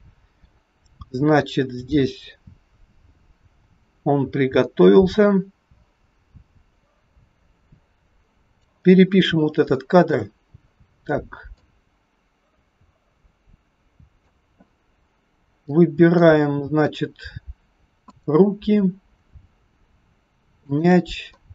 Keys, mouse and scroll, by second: 9.8 shift+middle click, 11.6 click, 15.7 middle click, 16.3-16.6 scroll up 3, 18.1 click, 20.5 shift+click, 21.3 middle click.